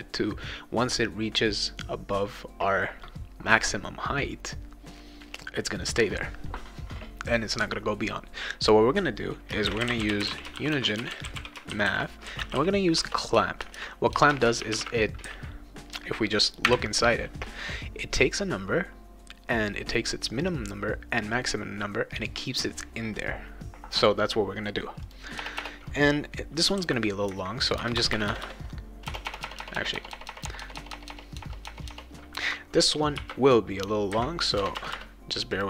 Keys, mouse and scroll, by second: 9.4-15.2 typing, 16.6 ,, 25.0 click, 25.4 BackSpace, 25.6 BackSpace, 26.7 ;, 27.8 Return, 28.0 Return, 29.1-29.9 typing, 31.4 BackSpace, 31.6 BackSpace, 31.9 BackSpace, 33.2 shift+0, 33.6 scroll up 2, 34.4 scroll down 2, 34.6 Return, 34.8 Return, 35.5 click.